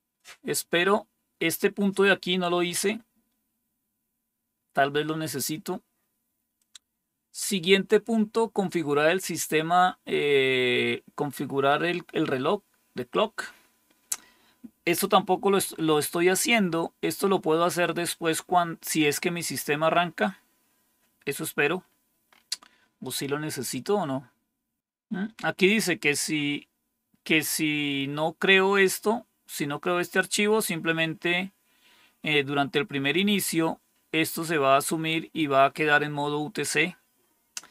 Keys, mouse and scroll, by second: 0.4-4.3 scroll down 1, 4.3-6.4 scroll down 1, 6.4 click, 13.5-14.4 scroll down 1, 14.4-15.5 scroll down 1, 15.5-17.6 scroll down 1, 17.6-19.2 scroll down 2, 19.2-20.3 scroll down 1, 20.3-21.1 scroll down 1, 36.8-37.7 scroll down 3.